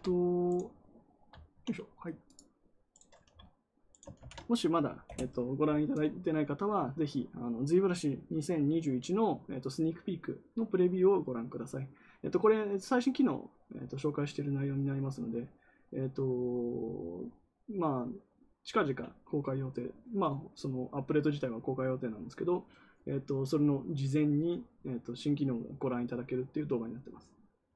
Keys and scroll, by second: 4.1 ctrl+v, 5.0 Return.